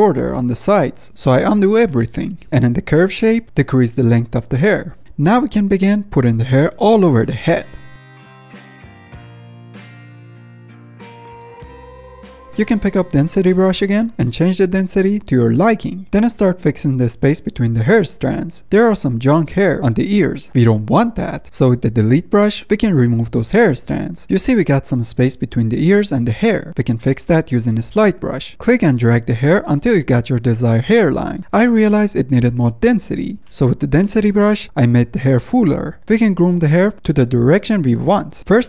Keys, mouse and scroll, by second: 0.1-0.7 middle drag, 0.7-1.1 drag, 1.1 ctrl+z, 1.2 middle click, 1.4 ctrl+z, 1.8 ctrl+z, 2.8-5.9 drag, 5.9 ctrl+z, 6.0-7.0 drag, 7.6 middle drag, 7.9 drag, 8.0 middle click, 8.2 drag, 8.4 middle drag, 8.5 drag, 8.7 shift+middle drag, 8.8-9.2 drag, 9.2 middle drag, 9.4 click, 9.7 f, 9.9 drag, 10.2 middle drag, 10.3 ctrl+z, 10.4-10.9 drag, 10.9 ctrl+z, 10.9 f, 11.1-11.7 drag, 11.7 ctrl+z, 11.8 ctrl+z, 11.9-12.9 drag, 12.9 middle drag, 13.1 ctrl+z, 13.1 drag, 13.2 middle click, 13.4 scroll up 2, 14.0 click, 14.6 shift+r, 15.5-16.8 drag, 16.8-17.2 middle drag, 17.2-18.6 drag, 18.6-19.0 middle drag, 19.0-21.2 drag, 21.2-21.7 middle drag, 21.7-22.6 scroll up 1, 22.6 click, 22.7 middle drag, 23.0 click, 23.3-23.6 middle drag, 23.6-24.0 drag, 24.0-24.3 middle drag, 24.3-25.8 drag, 26.3-26.9 drag, 26.9 scroll down 1, 28.1-28.7 drag, 28.7 ctrl+z, 28.8 f, 29.1-30.1 drag, 30.1 middle click, 30.3-31.9 drag, 31.9-32.3 middle drag, 32.3-33.4 drag, 33.4 middle click, 33.5 scroll down 2, 33.7 f, 33.8-34.4 drag, 34.4 middle click, 34.5 ctrl+z, 34.6-35.1 drag, 35.1-35.7 middle drag, 35.7 drag, 35.9 ctrl+z, 36.1-37.1 middle drag, 37.1 click, 37.8 middle click, 38.1 click, 38.2 middle drag, 38.3-38.6 drag.